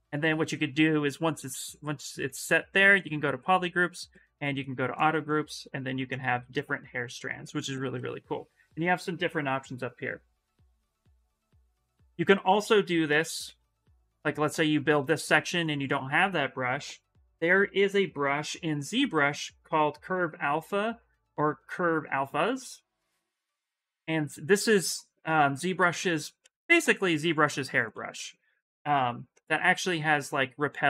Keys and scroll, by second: 0.3 2, 5.4 s, 9.3 shift+m, 9.7 shift+m, 12.2 ctrl+z, 12.8 ctrl+z, 13.2 ctrl+z, 13.5 ctrl+z, 13.9 ctrl+z, 14.2 ctrl+z, 18.2 c, 23.9 s, 27.9 ctrl+z.